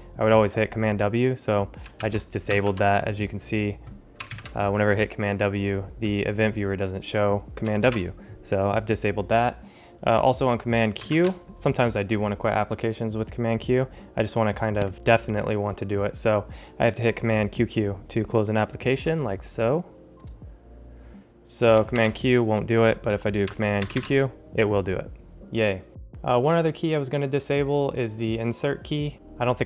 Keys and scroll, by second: 23.8 super+q.